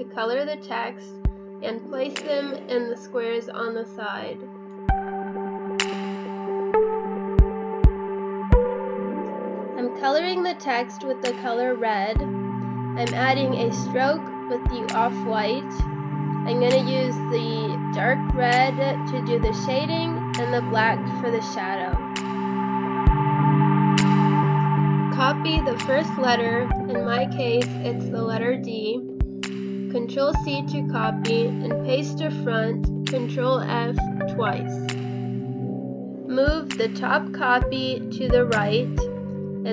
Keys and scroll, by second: 13.0 ctrl+v, 16.0 space, 16.8 ctrl+c, 17.7 ctrl+f, 23.6 space, 28.4 space, 29.4 space, 32.6 ctrl+f.